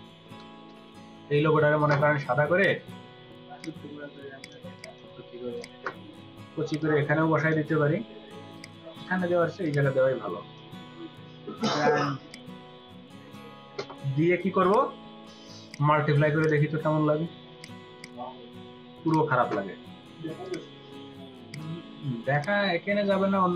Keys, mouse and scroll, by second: 4.4 ctrl+click, 5.0 space, 17.9 double click.